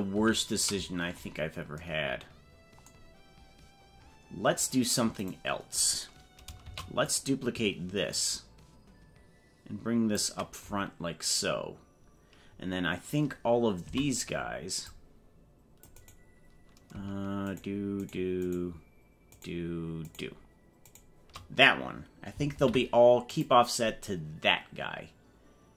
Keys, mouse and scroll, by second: 0.2 ctrl+z, 5.2 right click, 6.6 shift+d, 8.2-10.2 ctrl+drag, 17.4 shift+right click, 18.4 shift+right click, 19.4 shift+right click, 20.0 shift+right click, 20.8 shift+right click, 22.6 ctrl+p.